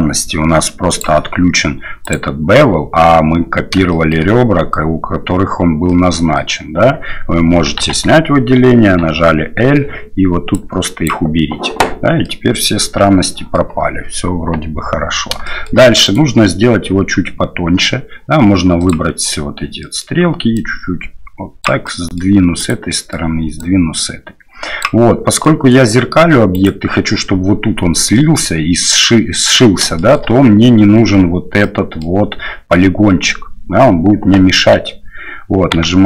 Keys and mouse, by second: 0.9-2.7 drag, 3.9 shift+middle click, 5.9 middle click, 7.9 alt+a, 9.0 l, 10.5 click, 12.4-13.6 middle drag, 15.6 shift+middle click, 16.0 right click, 18.8 click, 19.9 middle click, 20.6-21.6 drag, 21.6 middle click, 22.0 middle click, 22.6 right click, 22.9 middle click, 23.6-24.9 drag, 25.6 middle click, 26.5 right click, 28.1-29.5 middle drag, 29.9 shift+middle click, 31.6 middle click, 35.7 x.